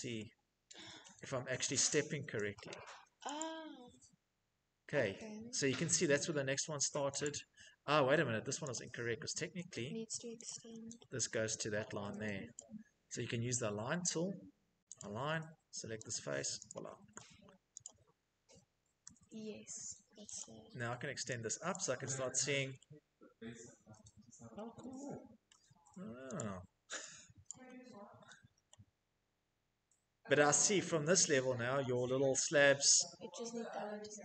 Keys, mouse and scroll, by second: 0.2-1.0 shift+middle click, 0.4 middle click, 0.6 middle click, 0.9-34.2 middle click, 1.0 Escape, 1.3 Escape, 2.5 click, 3.7 Escape, 4.0 Escape, 6.4 click, 7.9 click, 9.6 click, 11.7 click, 14.1 click, 15.3 click, 15.8 click, 16.1 Escape, 17.0 click, 17.8 Escape, 18.1-19.1 scroll, 19.1 scroll, 19.5 click, 20.8 click, 24.6 shift+middle click, 25.5 click, 26.6 click, 30.5 shift+middle click, 32.1 click.